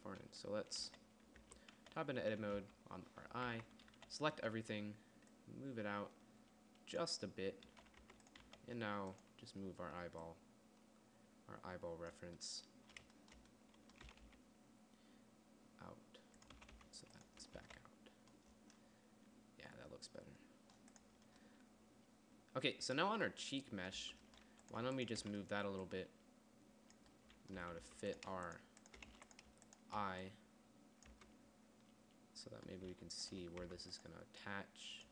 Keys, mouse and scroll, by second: 0.4-4.8 typing, 1.9 Tab, 8.1 z, 8.5 Tab, 8.9 z, 14.5 g, 17.0 r, 18.0 a, 21.6-23.5 middle drag, 24.4 Tab, 28.0 Tab, 28.3 Tab, 29.5 a, 31.6 Tab, 33.3 a, 34.1 Tab.